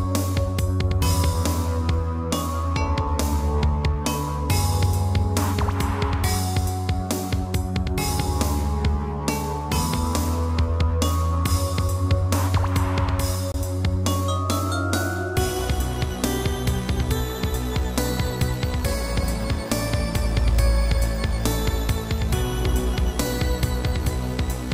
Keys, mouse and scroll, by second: 1.2 scroll down 2, 1.5 middle click, 2.0 shift+middle click, 2.4 middle click, 2.6 middle click.